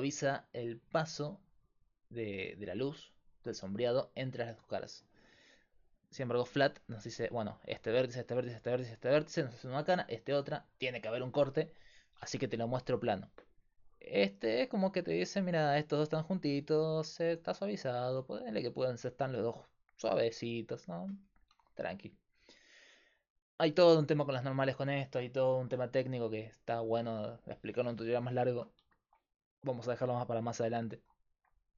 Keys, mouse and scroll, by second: 5.7-15.9 drag, 22.0-26.6 drag.